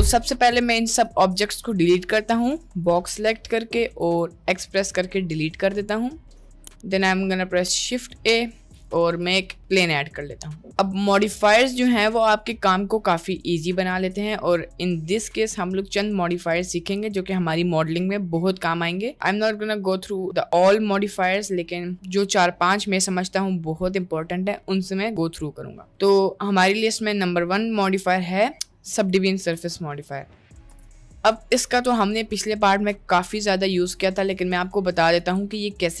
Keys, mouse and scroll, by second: 1.2-2.9 drag, 4.0 x, 6.5 shift+a, 10.0 middle click, 11.4 middle click, 24.6 middle click, 25.6 middle click, 28.1 drag, 35.2 shift+a.